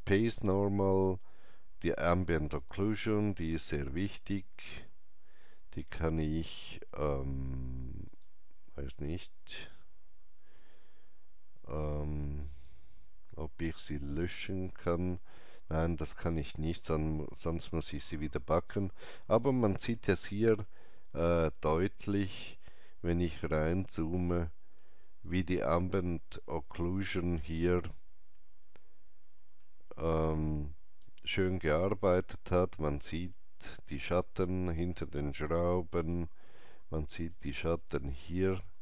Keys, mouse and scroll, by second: 8.0 click, 12.5 click, 14.6 click, 19.9 click, 20.2 alt+middle click, 22.6 alt+right click, 24.0 alt+middle click, 28.7 alt+middle click, 30.1-33.8 alt+drag, 35.7 alt+click, 35.7 alt+middle click, 35.7 alt+right click, 35.9 alt+click.